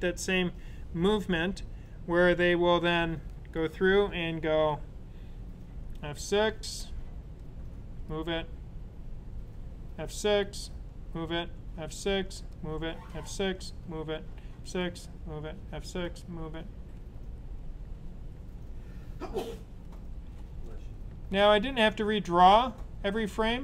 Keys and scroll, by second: 5.7 F6, 9.5 F6, 11.5 F6, 12.7 F6, 14.3 F6, 15.5 F6, 16.6 F6, 17.5-19.0 typing, 19.4 F6, 20.3 F6, 21.2 F6, 22.1 typing.